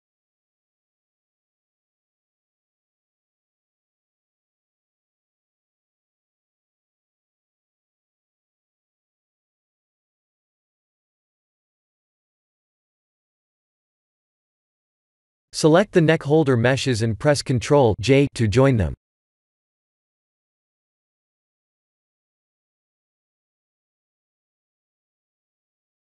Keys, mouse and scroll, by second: 0.0 3, 0.4 click, 1.7 g, 3.6 shift+z, 4.2 middle click, 5.3 Tab, 6.1 KP_3, 7.0 shift+d, 10.7 shift+click, 16.0 ctrl+j, 16.7 Tab, 17.1 middle click, 18.6 scroll down 2, 19.1 click, 19.6 scroll down 2, 20.5 scroll down 1, 21.3 scroll down 2, 23.2 KP_3, 23.8 KP_1, 24.6 scroll down 3.